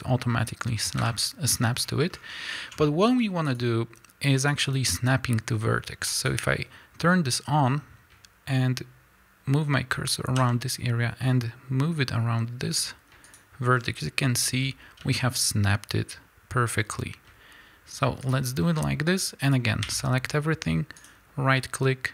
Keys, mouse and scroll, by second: 1.1 Escape, 1.5-2.5 scroll up 2, 1.6-3.6 middle drag, 3.1 g, 3.6 click, 4.4-13.4 drag, 10.4 g, 13.8-15.0 scroll down 2, 15.0 g, 18.3 click, 18.6 scroll down 1, 19.9 a, 21.0-22.1 right drag.